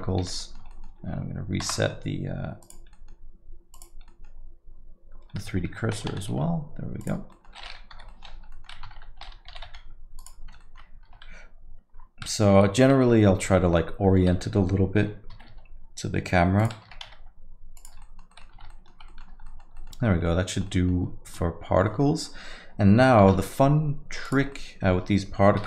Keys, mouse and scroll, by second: 0.3 alt+g, 0.4 middle click, 0.7 alt+middle click, 1.6 shift+c, 1.7 middle click, 2.6 click, 2.9 middle click, 3.7 click, 4.1 middle click, 5.1 scroll up 2, 5.3 alt+middle click, 5.9 Tab, 6.1 s, 7.3 alt+middle click, 7.9 o, 8.1 middle click, 8.3 scroll down 1, 8.5 alt+middle click, 8.9 Tab, 9.5 g, 10.6 alt+middle click, 11.0 Tab, 12.5 Escape, 13.5 alt+middle click, 13.8-14.1 scroll down 2, 14.2 Tab, 14.4 alt+middle click, 15.3 r, 16.8 Tab, 17.0 s, 18.0 alt+middle click, 18.3 alt+middle click, 18.6 Tab, 18.7 alt+middle click, 19.1 middle click, 19.4 alt+middle click, 19.7 middle click, 20.1 scroll up 1, 20.2 middle click, 20.5 scroll down 1, 20.6 alt+middle click, 21.8 alt+middle click, 23.2 shift+a, 24.6 middle click.